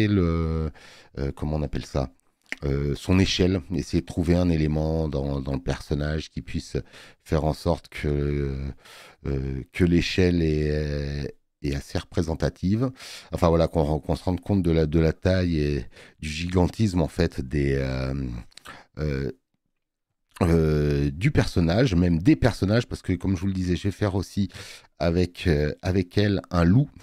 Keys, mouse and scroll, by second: 23.6 space, 23.8 click.